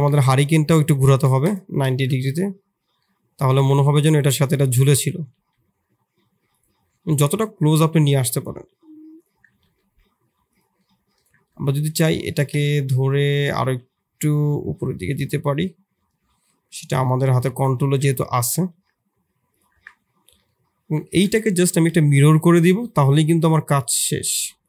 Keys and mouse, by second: 0.3 r, 1.9 shift+z, 2.2 middle click, 3.0 middle click, 3.5 g, 4.4 middle click, 5.1 g, 7.1 click, 7.8 click, 8.4 s, 9.5 g, 10.8 click, 11.1 Tab, 11.9 g, 13.6 g, 15.7 middle click, 16.4 middle click, 17.3 middle click, 17.7 shift+click, 18.4 g, 19.7 Tab, 20.4 middle click, 21.0 shift+middle click, 21.3 middle click, 22.7-24.6 drag.